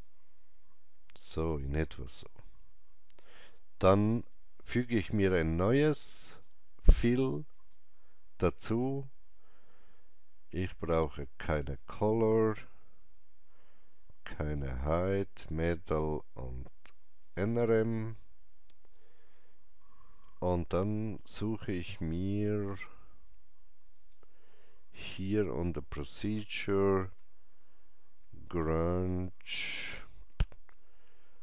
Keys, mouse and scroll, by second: 6.2-10.1 alt+drag, 6.2 alt+middle click, 11.4 click, 14.4 click, 23.9-31.4 drag, 27.1-29.6 typing.